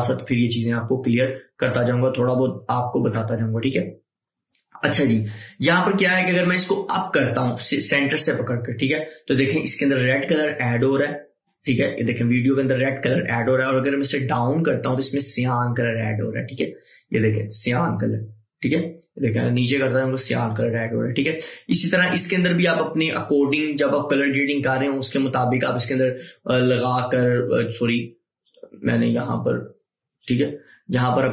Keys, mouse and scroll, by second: 7.7-17.7 drag, 22.0-31.3 drag.